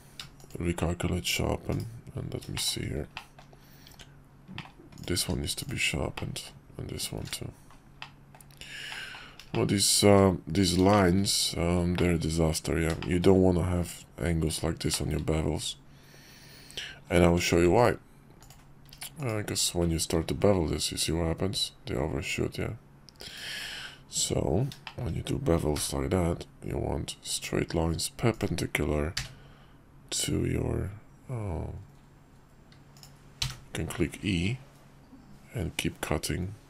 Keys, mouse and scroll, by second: 1.7 /, 2.5 shift+drag, 3.1 drag, 3.9 Tab, 4.5 middle click, 5.0 click, 5.2 q, 6.2 middle click, 7.0 click, 7.2 q, 8.0 middle click, 8.9 middle click, 9.5 shift+click, 10.9 shift+click, 11.9 shift+middle click, 13.0 shift+middle click, 14.9 shift+middle click, 17.3 Tab, 20.2 ctrl+b, 24.2 Tab, 24.8 shift+click, 25.7 k.